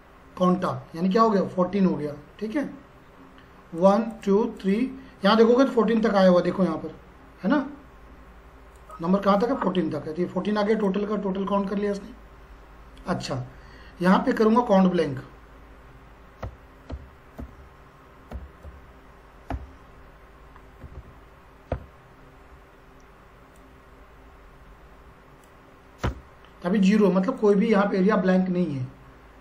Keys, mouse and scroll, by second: 0.5 click, 3.7 click, 8.7 click, 14.4 click, 16.2-19.5 typing, 20.8 Down, 21.7 Tab, 23.6-26.0 drag, 26.0 Return, 27.4 click.